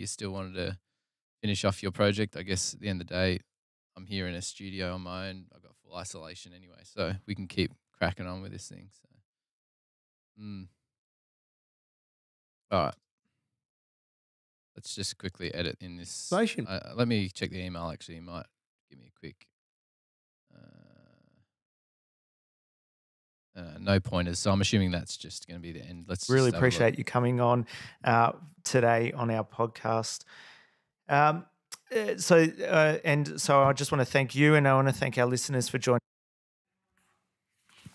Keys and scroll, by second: 9.8 super+Tab, 12.7 space, 13.4 super+], 13.6 super+], 15.3 space, 16.2 space, 16.6 super+Tab, 17.0 super+Tab, 17.3 super+Tab, 17.5 super+Tab, 17.6 super+Tab, 26.6 super+Tab, 28.1 super+Tab, 29.5 super+Tab, 29.7 super+Tab, 31.3 super+Tab, 32.0 super+Tab, 35.4 super+].